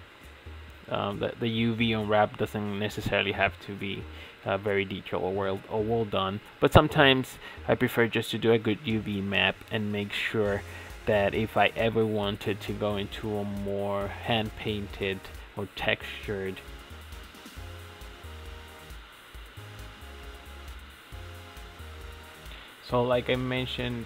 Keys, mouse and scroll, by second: 0.1 middle click, 0.5-2.2 middle drag, 2.2 click, 2.3-2.8 middle drag, 4.6-5.0 middle drag, 5.5 click, 6.3 middle drag, 6.6-7.4 middle drag, 7.6 middle click, 8.4 middle click, 8.8 click, 9.1 shift+middle click, 9.2 scroll down 4, 9.3 shift+middle click, 9.4 scroll up 7, 9.6 shift+middle click, 9.9 click, 10.2 Tab, 10.9 shift+middle click, 11.4 click, 12.8 click, 13.4-17.3 middle drag, 17.3 shift+s, 20.4 shift+a, 23.8-24.0 drag.